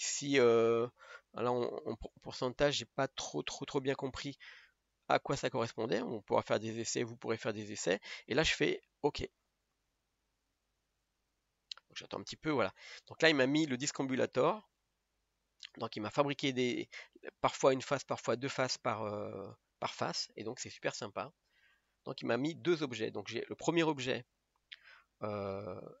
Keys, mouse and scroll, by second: 12.9-13.5 middle drag, 13.5-14.3 scroll up 2, 14.3-15.5 middle drag, 15.5-16.4 scroll up 1, 16.4-18.0 scroll up 1, 18.0-18.3 scroll up 1, 18.3-19.1 scroll down 3, 19.1-19.7 middle drag, 19.7-20.2 scroll up 1, 20.2-21.4 scroll down 2, 21.4-21.7 scroll down 1, 21.7 click, 22.6-26.0 middle drag.